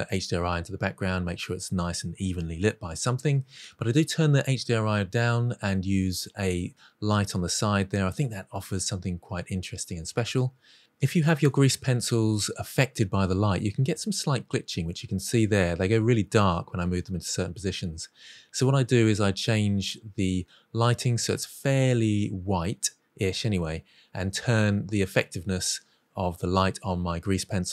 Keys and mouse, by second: 0.3 middle click, 1.4 middle click, 1.7 middle click, 1.9 click, 3.0 click, 3.7 middle click, 4.0-4.4 middle drag, 6.3-7.3 middle drag, 7.5 middle click, 7.9 middle click, 8.3 middle click, 8.7 middle drag, 9.0 middle click, 9.3 middle click, 9.5 ctrl+shift+middle drag, 11.2-11.6 drag, 11.7 middle drag, 12.1-12.6 middle drag, 12.8-13.2 middle drag, 13.2 shift+middle click, 13.4-13.9 middle drag, 14.1-14.6 middle drag, 14.7-15.4 middle drag, 15.6 middle drag, 16.2 middle drag, 17.1 click, 22.1-22.5 drag, 22.7 click, 22.9 middle drag, 23.3 middle drag, 24.2 click, 26.1 click, 26.8-27.7 drag.